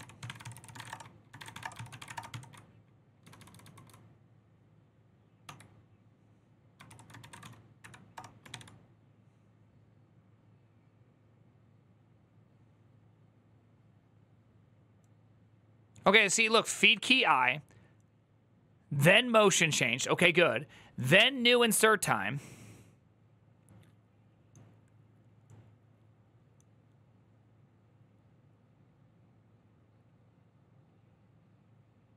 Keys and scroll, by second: 0.0-3.5 typing, 0.6 Return, 5.0-8.3 typing, 6.6 ctrl+c, 7.9 Return.